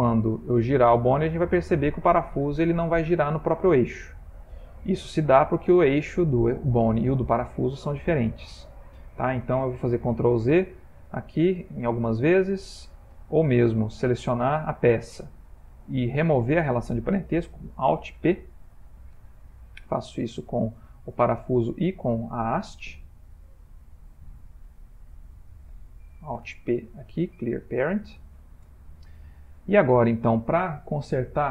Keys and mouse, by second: 0.6 r, 10.5 ctrl+z, 11.5 ctrl+z, 12.2 ctrl+z, 12.5 ctrl+z, 13.7 click, 15.8 click, 17.9 alt+p, 20.4 click, 21.5 click, 22.5 click, 23.5 middle click, 24.1 middle click, 24.9 click, 26.4 alt+p, 29.8 middle click, 30.5 middle click, 30.5 middle click.